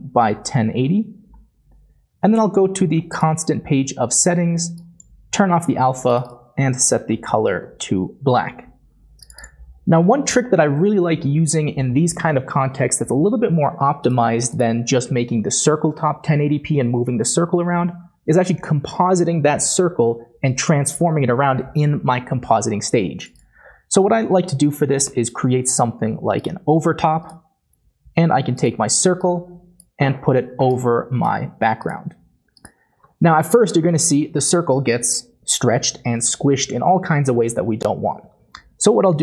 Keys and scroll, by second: 7.0-7.6 typing, 7.1 Tab, 7.5 Tab, 7.8 Return, 10.1 typing, 14.7-15.4 typing, 24.7-25.1 typing, 26.8-27.5 typing.